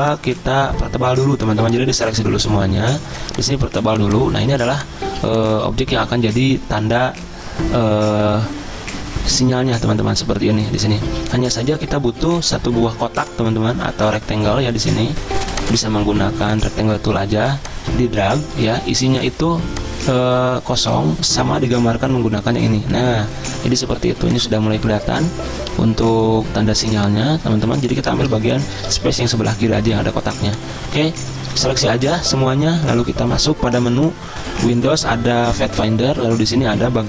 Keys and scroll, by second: 4.6 z, 5.9 v, 18.6 ctrl+z, 24.0 z, 28.3 space, 29.2 v.